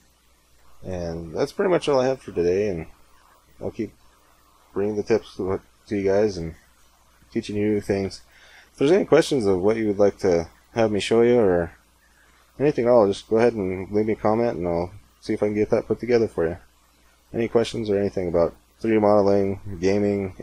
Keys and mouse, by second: 1.5-20.4 middle drag.